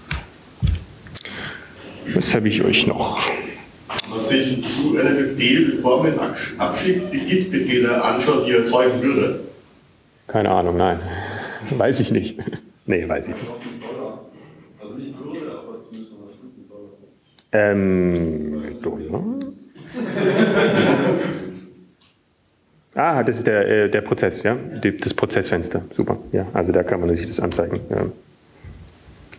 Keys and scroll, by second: 1.6 typing, 3.2 typing, 24.8 shift+4.